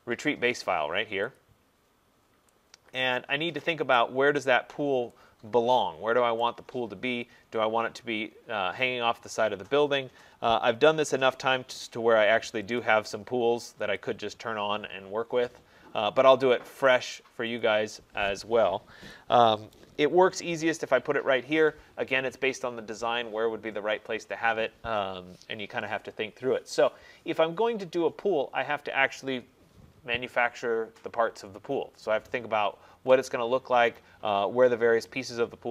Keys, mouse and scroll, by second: 1.4 click, 2.1 middle click, 2.2 middle click, 4.0 right click, 4.3 middle click, 4.5 middle click, 6.5 right click, 6.8 middle click, 6.9 middle click, 7.5 middle click, 7.7 middle click, 9.0 middle click, 9.1 middle click, 9.4 middle click, 11.9 scroll, 12.0 click, 12.8 click, 14.0 click, 16.4 click, 17.0 click, 18.0 click, 18.6-19.0 scroll, 19.8 right click, 24.7 right click, 27.4 middle click, 28.3 middle click.